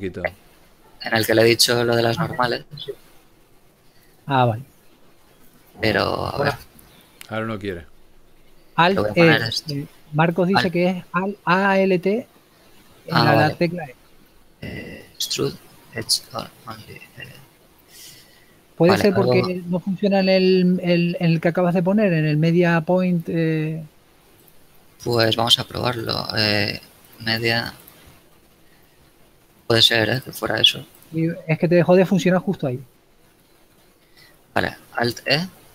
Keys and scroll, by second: 3.0 shift+e, 4.9 ctrl+z, 13.5 alt+e.